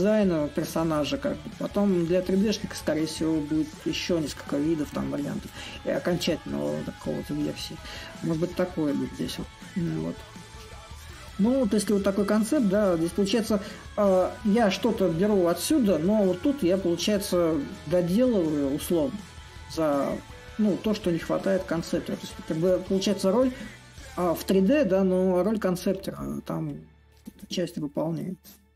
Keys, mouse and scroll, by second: 0.0-5.0 drag, 7.0-8.1 drag, 8.1-12.0 middle drag, 14.6 click, 14.7-19.6 middle drag, 20.2-25.3 drag, 25.9-28.7 drag.